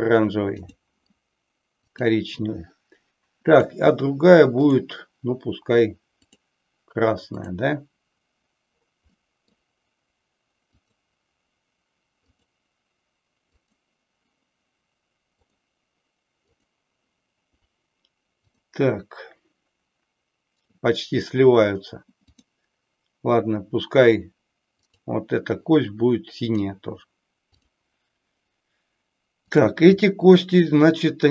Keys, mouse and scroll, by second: 0.6 click, 1.9 click, 3.4 click, 4.5-6.3 drag, 9.1-9.6 middle drag, 10.7 click, 12.2 click, 13.5 click, 16.5 click, 27.5 click, 29.5 click, 31.2 shift+click.